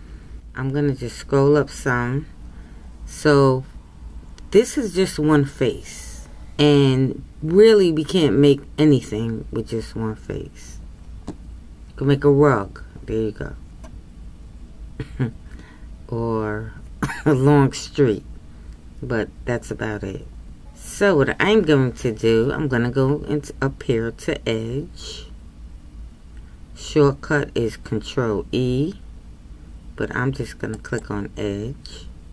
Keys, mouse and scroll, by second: 0.8-1.7 scroll up 2, 4.4-32.3 scroll up 1.